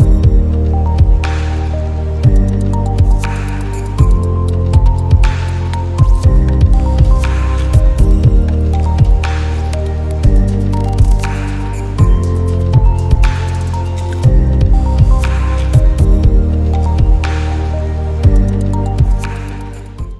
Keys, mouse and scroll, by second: 1.4 ctrl+x, 2.1 click, 6.0 right click, 6.8 click, 9.6 click.